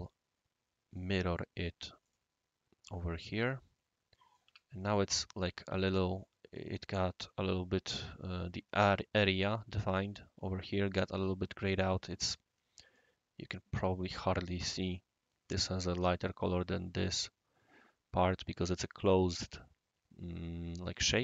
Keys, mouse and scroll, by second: 0.9 click, 2.0 click, 3.1-4.3 right drag, 4.4 Escape, 4.6-7.1 right drag, 11.5-13.7 right drag.